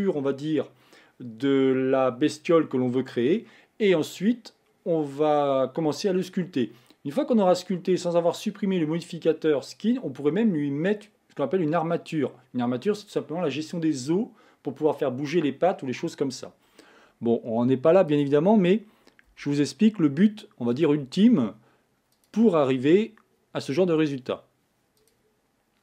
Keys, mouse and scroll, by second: 18.1 click, 19.3 e, 21.0 e, 22.5 e, 24.0 e.